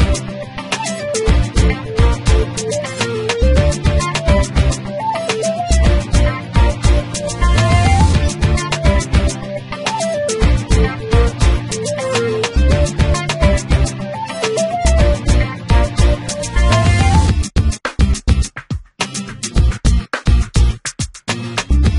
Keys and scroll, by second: 1.7 g, 1.8 x, 2.1 y, 4.0 g, 4.1 x, 5.9 s, 7.1 g, 10.1 r, 10.3 z, 13.2 Tab.